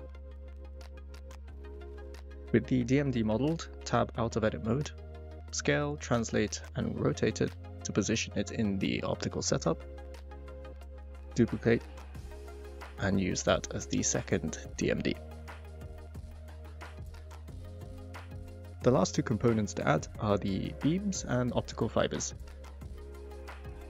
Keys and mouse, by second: 2.7 click, 3.1 click, 3.7 Tab, 6.2 click, 7.1 s, 8.9 -, 9.0 9, 9.0 0, 9.3 Return, 9.8 s, 11.1 g, 11.2 y, 12.0 click, 13.7 r, 13.9 z, 14.1 9, 14.2 0, 15.2 g, 15.3 y, 16.1 click, 16.9 g, 17.2 x.